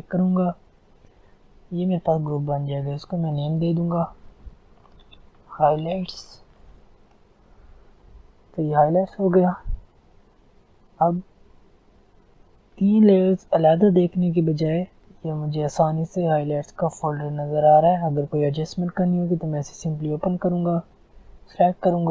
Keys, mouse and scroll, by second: 0.4 click, 2.6 click, 4.4-6.6 typing, 6.9 Return, 9.4 click, 14.2-15.0 scroll down 1, 15.0 click, 19.2 click, 19.7-20.8 scroll down 1, 20.8-22.1 drag.